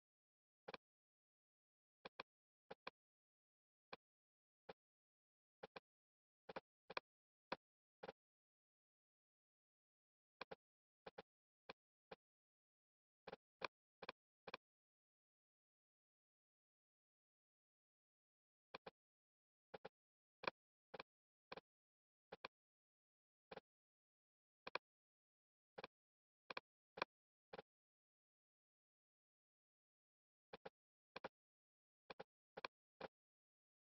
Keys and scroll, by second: 23.0 super+z, 28.2 Escape.